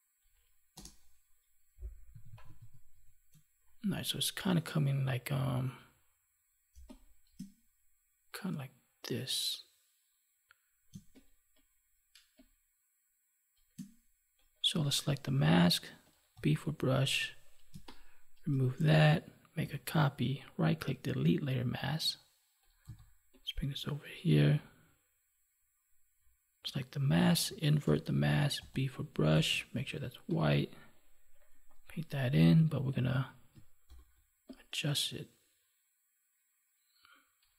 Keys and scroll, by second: 6.7 space, 10.9 space, 17.7 space, 19.6 ctrl+j, 27.8 ctrl+i, 33.8 ctrl+t.